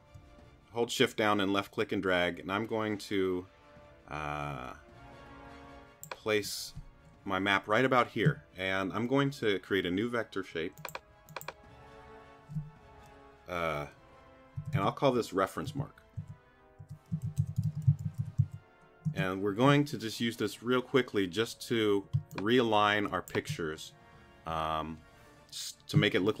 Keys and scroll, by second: 14.3-18.9 typing, 19.0 Return, 22.1 space.